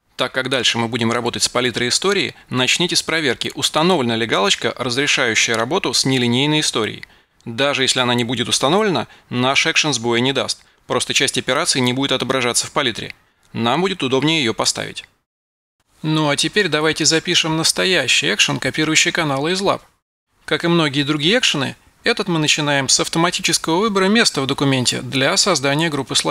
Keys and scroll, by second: 24.3-26.3 typing.